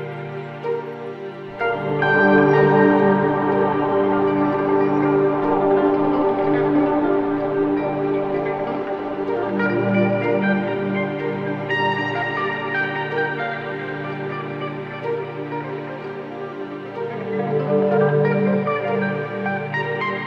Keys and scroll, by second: 3.5 3, 3.8 ], 5.7 ,, 7.7 4, 10.6 3, 11.3 4, 12.1 ctrl+d, 12.2 Escape, 13.3 9, 13.5 -, 13.7 Return.